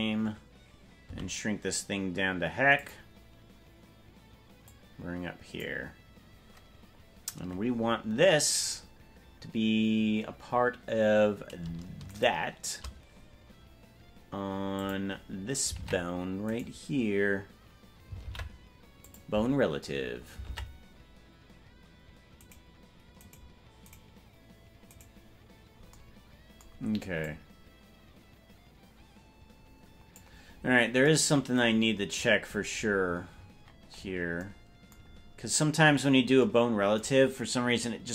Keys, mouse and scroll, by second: 4.6-5.6 drag, 4.6 s, 12.2 shift+right click, 14.7 click, 15.8 ctrl+Tab, 16.5 right click, 18.1 ctrl+p, 20.4 ctrl+Tab, 22.5 right click, 23.3-25.8 right drag, 27.2-30.3 drag, 30.4 scroll up 1, 30.5-31.0 scroll down 5, 32.1-33.7 scroll down 1, 33.7 scroll down 1, 33.9-34.3 scroll down 2, 35.0 scroll down 1, 35.1 scroll up 1, 35.1-35.9 scroll down 1, 35.9 scroll down 4.